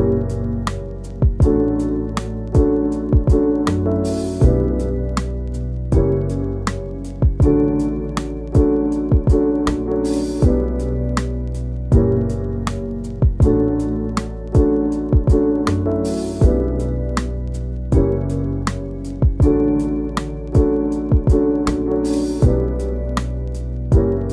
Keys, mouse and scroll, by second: 0.0 click, 0.1 scroll down 1, 2.9 click, 3.0-3.4 middle drag, 3.4 click, 3.5 scroll down 1, 4.0 click, 4.1 scroll up 1, 4.4 click, 4.5-5.5 scroll down 1, 5.5-6.1 middle drag, 6.1 scroll up 1, 6.2 middle click, 7.2-7.6 middle drag, 7.6 scroll up 1, 7.7 scroll down 2, 8.6 click, 8.7-10.0 right drag, 10.0 click, 23.6 scroll up 2, 23.8 a.